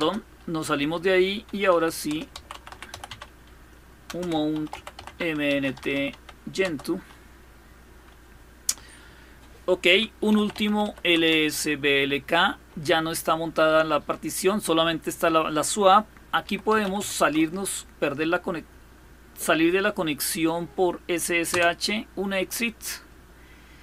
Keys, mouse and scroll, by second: 0.9-7.0 typing, 9.6-11.0 typing, 15.9-17.2 typing, 21.2 Return.